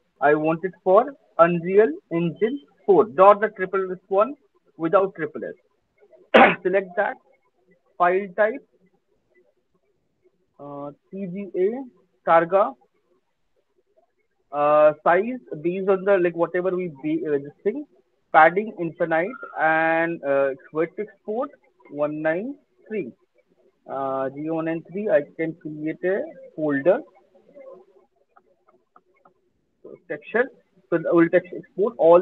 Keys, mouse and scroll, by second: 0.8-2.0 scroll, 5.0 click, 8.5 click, 9.1-10.1 scroll, 10.3-10.8 scroll, 12.1 click, 12.2 middle click, 18.5 click, 19.3 click, 20.0 click, 22.8 click, 24.4 click, 25.4 click, 26.2 click, 27.3-29.8 typing, 30.8 click, 32.0 typing.